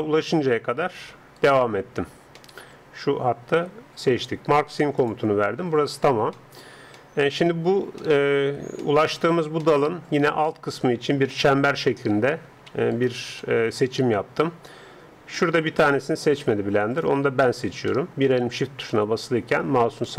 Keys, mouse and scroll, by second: 1.4-4.0 right drag, 5.0-7.0 drag, 7.0-8.5 middle drag, 11.5 a, 11.8 a, 12.4 a, 12.9-14.2 alt+right drag, 13.4 alt+click, 14.3 alt+right click, 14.4 middle click, 14.5 alt+right click, 14.6 middle click, 16.0-18.6 middle drag, 17.4 right click, 18.6 right click, 18.9-20.1 middle drag.